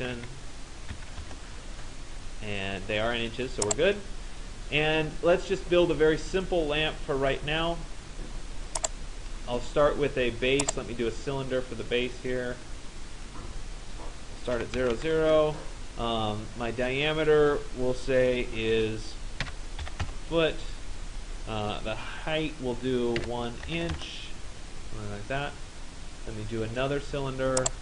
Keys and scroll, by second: 0.0-1.0 typing, 1.2 Return, 14.8 Return, 19.1 1, 20.1 Return, 23.2 1, 24.0 Return.